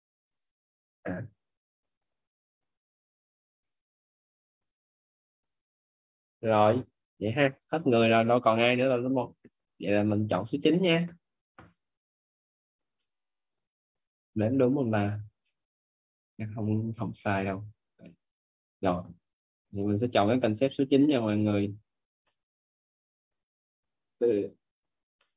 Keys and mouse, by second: 13.0 middle click, 21.0 middle click, 25.1 middle click.